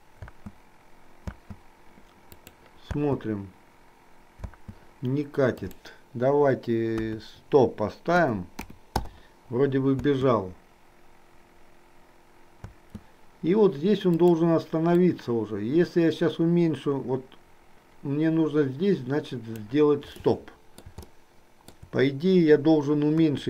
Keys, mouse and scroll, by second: 0.4 space, 2.4 click, 5.7-9.2 drag, 10.0 space, 14.3 click, 15.2-19.7 drag, 20.4 middle click, 21.2 shift+middle click, 23.3 KP_1.